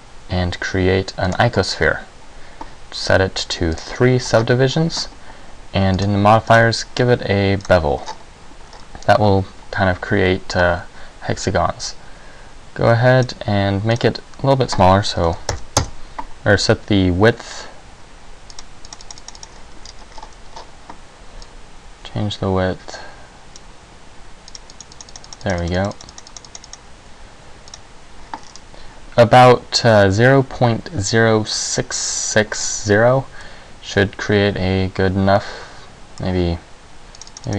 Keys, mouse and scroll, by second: 3.9 click, 4.5-5.5 scroll up 4, 5.5 scroll up 1, 6.1 click, 6.6 click, 8.1-8.5 scroll up 5, 8.9-10.5 scroll up 3, 12.0 click, 14.1 click, 18.7 click, 19.0 click, 19.2 click, 19.3 click, 19.5 click, 20.0-20.3 scroll down 2, 20.3-21.7 scroll up 7, 21.7-25.9 click, 25.7 click, 26.1 click, 26.4 click, 26.7 click, 26.9 click, 27.9 click, 28.5-29.2 scroll down 5, 33.5 middle click, 37.3 click, 37.4 click.